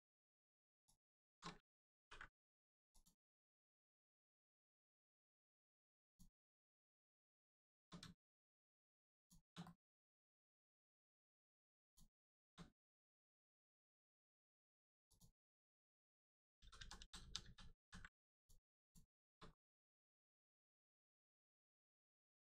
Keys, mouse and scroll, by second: 0.8 alt+shift+click, 1.9 ctrl+e, 2.9 click, 3.4-3.8 scroll down 1, 3.9 middle click, 4.9-5.8 scroll up 1, 6.0 click, 6.4 middle click, 7.5 shift+middle click, 9.1 shift+click, 9.5 middle click, 9.6 middle click, 11.8 shift+click, 12.2 shift+middle click, 12.7 middle click, 12.8 middle click, 13.3 shift+middle click, 15.0 shift+click, 15.4 middle click, 16.5 ctrl+z, 16.7 ctrl+z, 16.9 ctrl+z, 17.1 ctrl+z, 18.3 click, 18.7 alt+shift+click, 19.4-20.3 alt+scroll up 2, 20.3 click, 20.7 alt+click, 21.7 alt+shift+click.